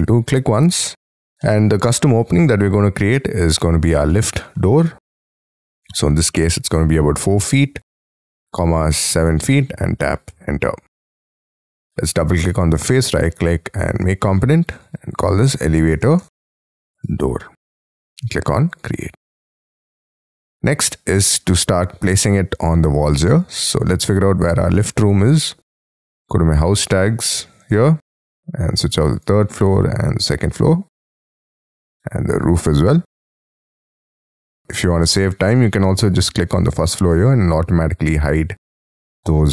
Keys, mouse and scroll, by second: 1.4 middle click, 4.1 middle click, 6.8 typing, 8.2-9.4 typing, 10.3 Return, 11.1 space, 11.7-12.2 scroll up 4, 12.2 double click, 12.8 right click, 14.6-17.6 typing, 20.0 middle click, 21.1-21.7 scroll down 13, 21.9-22.6 scroll up 6, 28.0 double click, 30.9 middle click, 32.9 scroll down 6, 33.6 scroll up 5, 34.6 double click.